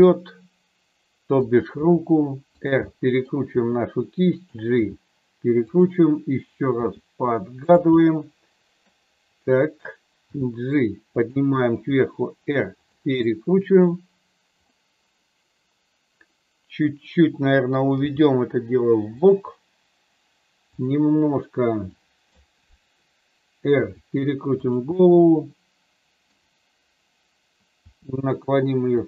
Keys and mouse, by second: 0.0-1.4 middle drag, 1.7 r, 2.5 click, 2.8 middle click, 3.5 r, 4.8 g, 5.7 click, 6.8 r, 7.5 click, 7.9 middle click, 10.3 g, 11.1 click, 11.7 r, 12.8 click, 13.2 middle click, 14.7-16.8 middle drag, 17.9 g, 19.2 click, 20.7 click, 21.9 middle click, 23.8 r, 24.9-26.3 middle drag, 27.8 r, 28.9 click.